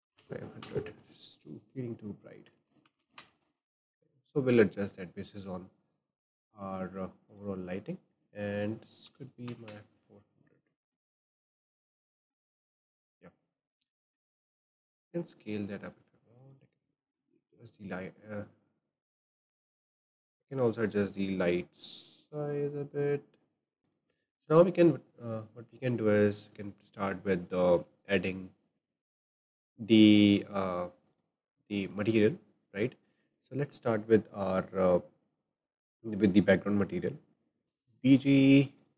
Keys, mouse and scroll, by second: 0.1 KP_0, 0.6 KP_0, 1.9-3.2 drag, 3.0 KP_0, 3.2 KP_0, 7.2 click, 8.5 click, 9.4 KP_0, 9.7 KP_0, 11.5 click, 13.8-14.4 shift+middle drag, 14.4 click, 15.1 s, 16.4 click, 16.7-19.8 right drag, 19.8 click, 20.5 click, 20.8-23.7 right drag, 23.9 click, 27.3-30.5 drag, 31.5-32.1 scroll down 4, 32.1-33.3 shift+middle drag, 33.3 click, 37.6-38.9 drag.